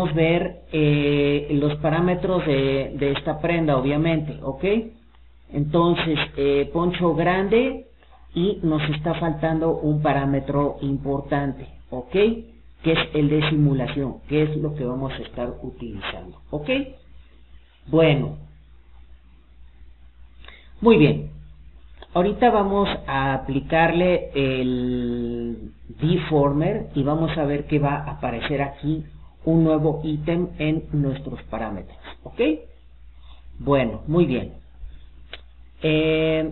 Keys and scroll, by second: 31.0 Escape.